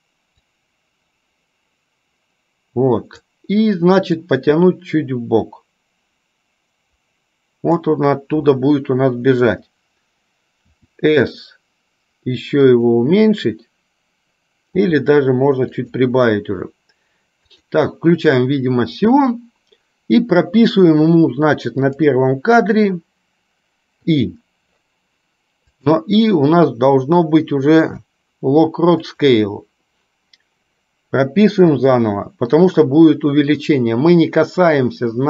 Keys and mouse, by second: 0.4 click, 0.8-3.5 drag, 4.6-8.1 drag, 22.1 click, 25.8-30.3 drag.